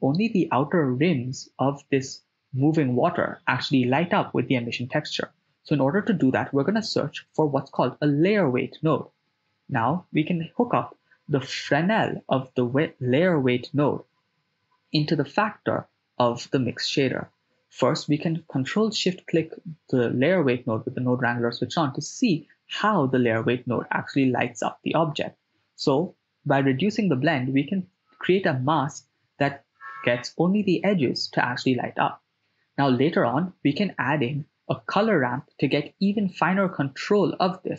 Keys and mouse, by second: 1.5 middle click, 3.2 shift+a, 6.1 BackSpace, 11.1 middle click, 16.2 ctrl+shift+click, 18.6-19.4 ctrl+middle drag, 23.4 ctrl+middle click, 25.5-27.6 drag, 28.0-29.7 drag, 32.0-33.5 middle drag, 34.1-36.5 middle drag, 36.7 ctrl+middle click.